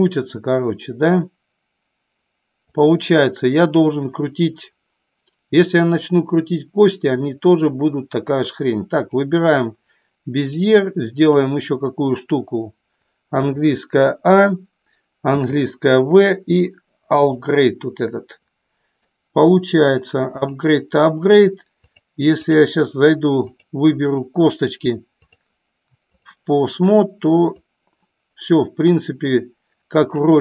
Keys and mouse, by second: 2.7 click, 8.9 click, 10.5-11.4 drag, 13.3 a, 15.2 v, 18.9 middle click, 20.4 click, 21.9-22.6 drag, 23.4 click, 25.2-26.3 drag, 27.6-30.1 drag.